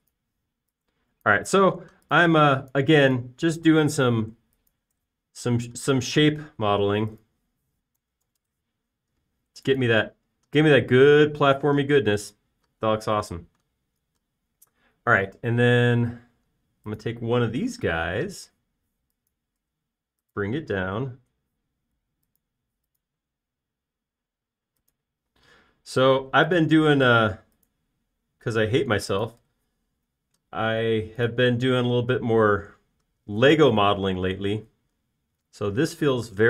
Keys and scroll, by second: 1.0-1.7 typing, 2.8 space, 4.8 m, 9.6-11.0 typing, 19.5 m, 22.2 q, 23.5 Up, 33.1 alt+space.